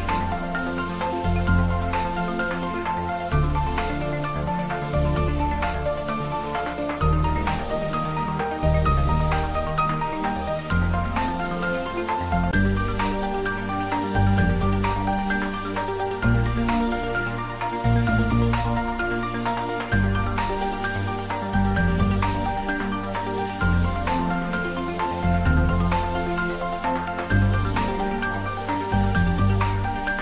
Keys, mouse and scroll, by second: 0.4 Tab, 1.5-1.9 scroll down 1, 2.0-3.8 scroll up 1, 4.6 click, 5.2 scroll down 1, 5.8-7.3 middle drag, 8.8 scroll up 1, 9.7-10.3 middle drag, 11.0 scroll up 1, 14.0 Tab, 14.8 click, 15.6 Tab, 15.8 click, 16.3 Tab, 20.0 click, 21.3 shift+click, 22.4-22.8 scroll down 1, 23.4-23.9 scroll up 1, 24.2 shift+click, 25.0 scroll up 1, 26.3 click.